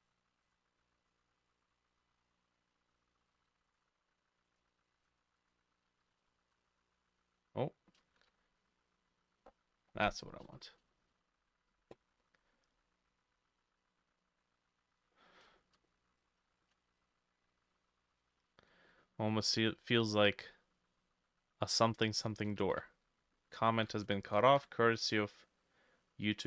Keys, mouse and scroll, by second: 0.8 middle click, 3.0 middle click, 3.4 3, 3.7-6.2 alt+middle drag, 3.7 alt+click, 4.5 alt+click, 5.0 alt+click, 6.1 s, 6.4 shift+middle click, 6.5 shift+z, 8.1 shift+middle click, 8.3 shift+y, 10.1 shift+middle click, 10.9 shift+middle click, 10.9 shift+scroll down 1, 15.5 shift+middle click, 16.5 shift+middle click, 22.0 3, 22.4 alt+middle click, 22.6 alt+click, 23.8 s, 24.2 shift+middle click, 24.6 shift+y.